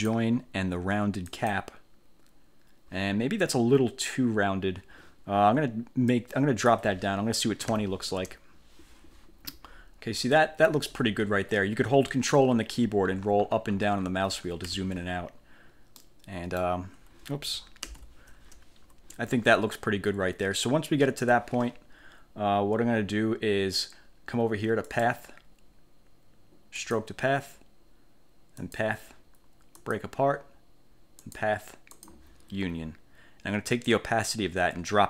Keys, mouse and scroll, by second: 0.0 click, 1.4 click, 6.2 click, 7.7 2, 8.3 0, 9.7-10.3 ctrl+scroll up 2, 12.7-13.1 ctrl+scroll down 2, 13.1 ctrl+scroll up 2, 13.3 ctrl+scroll down 2, 13.5 ctrl+scroll up 2, 13.7 ctrl+scroll down 2, 13.8 ctrl+scroll up 2, 14.0 ctrl+scroll down 2, 14.1 ctrl+scroll up 1, 14.7 ctrl+1, 16.1 click, 18.0 ctrl+z, 25.0 click, 26.9 click, 28.7 click, 29.9 click, 31.4 click, 32.1 click, 34.0-35.0 drag.